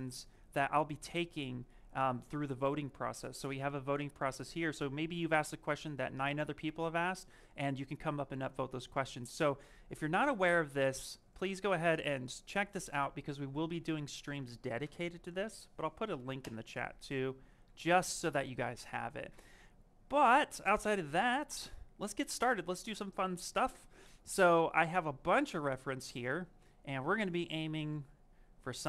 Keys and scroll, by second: 16.0 ctrl+v, 16.3 Return.